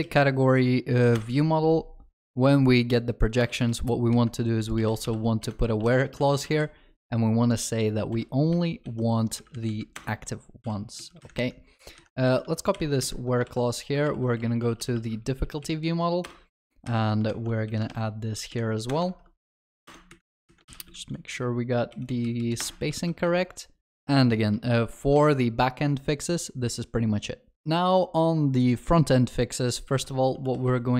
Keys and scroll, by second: 5.5 Return, 13.5 ctrl+c, 14.0 ctrl+c, 14.1 ctrl+shift+n, 19.1 ctrl+v, 20.7 ctrl+y, 23.3 ctrl+s, 30.0 ctrl+shift+n.